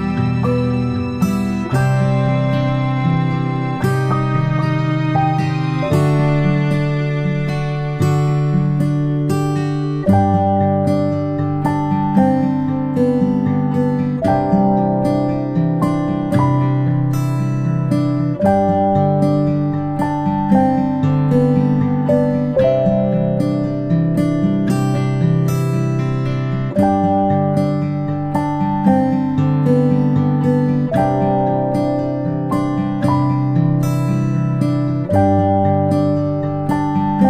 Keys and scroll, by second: 0.9 ctrl+z, 36.0 ctrl+[, 36.1 ctrl+[, 36.5 ctrl+].